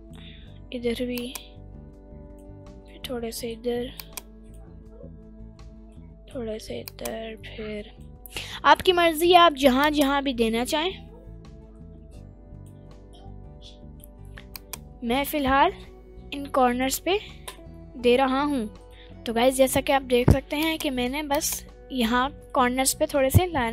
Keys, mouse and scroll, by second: 1.5 click, 3.1 middle click, 4.3 click, 5.9 middle click, 7.2 click, 8.5 middle click, 10.1 click, 13.2 middle click, 14.8 click, 18.9 right click, 20.6-21.9 drag, 22.1-22.7 scroll down 2, 22.5-23.6 middle drag.